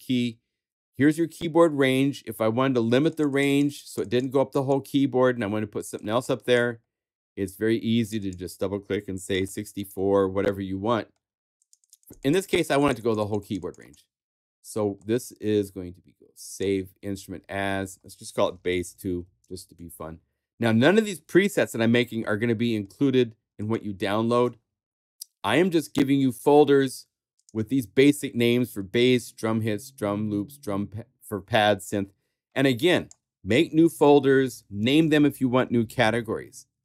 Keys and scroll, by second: 18.4-19.7 typing, 25.0 super+Tab.